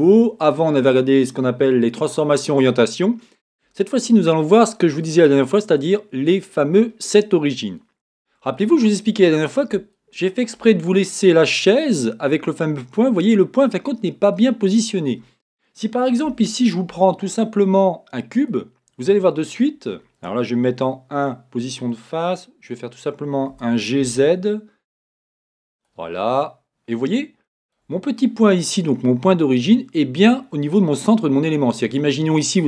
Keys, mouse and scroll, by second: 2.0-5.2 scroll down 1, 5.2 click, 9.3-9.9 scroll up 2, 18.0 a, 20.8 KP_1, 23.3-25.8 drag, 23.8 g, 25.8 click, 26.2-32.6 middle drag.